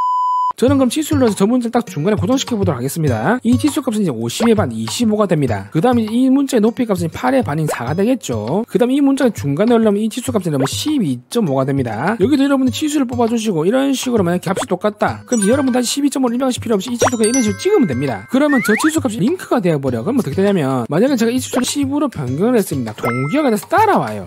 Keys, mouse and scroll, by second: 3.8 click, 4.4 click, 4.8-6.3 typing, 6.1 click, 6.9 click, 7.7 click, 8.9 d, 9.2 click, 10.1 click, 10.6 click, 10.8-11.8 typing, 12.6 click, 13.7 click, 14.6 click, 18.1 click.